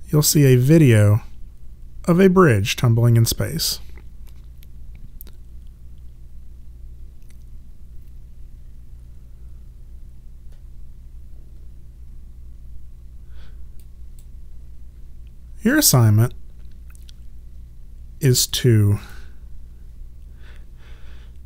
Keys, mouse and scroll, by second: 13.8 click, 18.4 click.